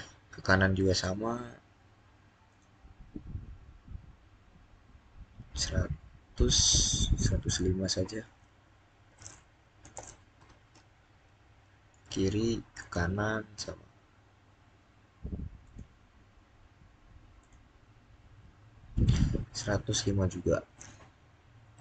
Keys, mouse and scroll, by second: 0.7 Return, 7.9-9.7 typing, 10.2 Return, 12.6 click, 15.5 click, 19.5-21.8 typing.